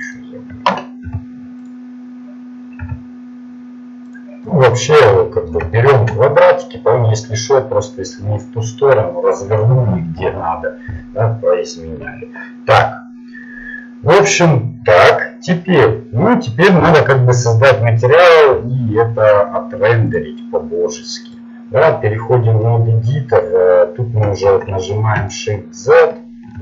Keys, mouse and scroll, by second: 0.1-1.7 right drag, 2.9 s, 4.4-9.9 middle drag, 12.0-14.1 middle drag, 17.6 middle click, 21.6-23.2 middle drag, 24.5 shift+z.